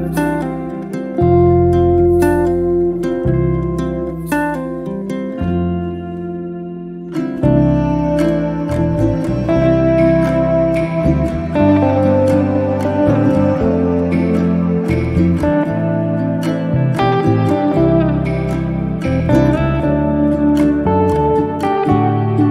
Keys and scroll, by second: 1.2 Return, 5.8 e, 20.6 e, 20.8 space.